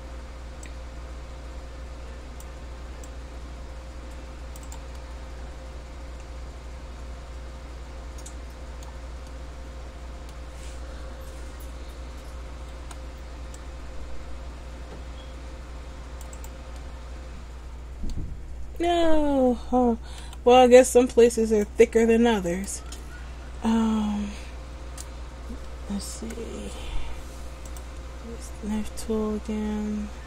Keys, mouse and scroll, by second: 3.1 t, 4.9 right click, 5.1 middle click, 9.5 middle click, 12.9 c, 16.6 right click, 16.9 middle click, 20.4 c, 22.8 right click, 26.3 k.